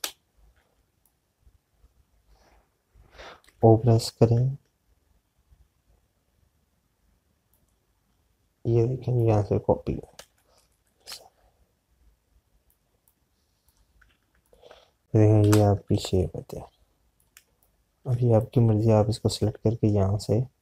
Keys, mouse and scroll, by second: 0.7 Right, 1.4 z, 1.9 click, 8.9 alt+click, 14.1 click, 15.4 shift+click, 16.3 Left, 18.3 space, 18.4 click.